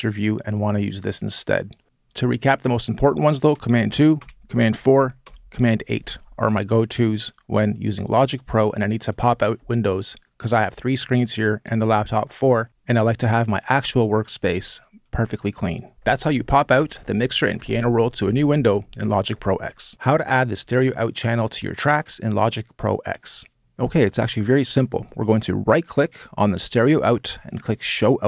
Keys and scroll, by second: 3.3 super+2, 4.0 super+4, 5.0 super+8.